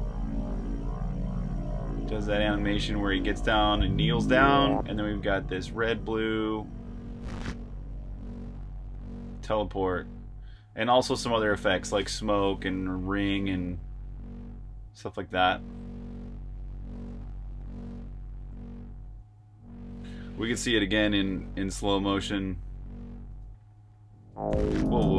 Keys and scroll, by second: 0.0-0.7 typing, 23.8-25.1 typing.